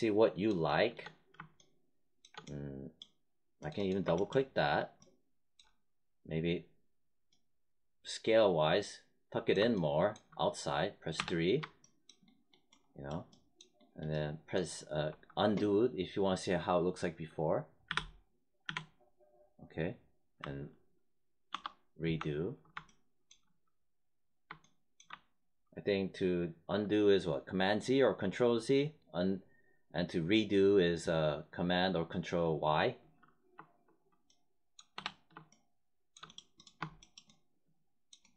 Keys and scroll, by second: 11.1 3, 17.8 z, 21.5 ctrl+y, 25.0 1, 34.9 3.